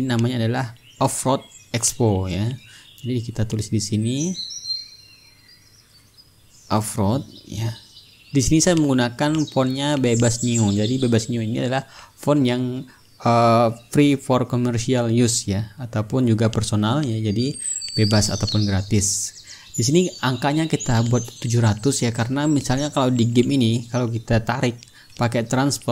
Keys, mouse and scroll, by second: 1.5 click, 4.1 click, 5.6-8.1 typing, 8.1 ctrl+a, 8.8 click, 9.6 b, 9.9 e, 11.2 click, 13.1 click, 15.3 KP_7, 15.6 KP_0, 17.5 ctrl+a, 18.2-20.7 drag, 20.8-23.9 drag, 24.7 ctrl+shift+d, 25.1 ctrl+click.